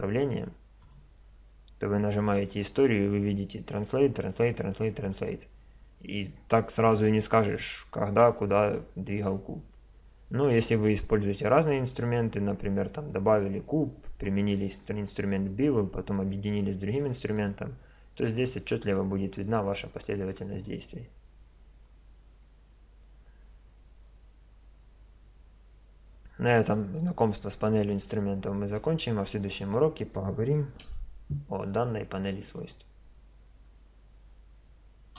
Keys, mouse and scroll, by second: 0.8 click, 19.4-20.5 middle drag, 20.5-22.1 drag, 22.3 click, 30.9 n.